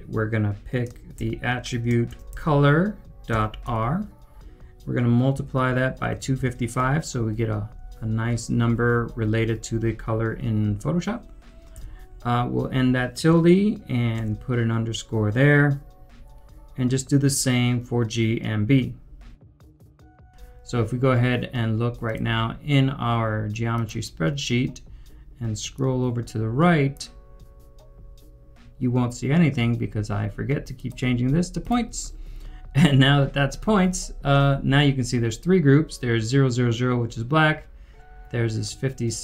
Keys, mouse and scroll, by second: 0.9-7.7 typing, 19.6-19.9 typing.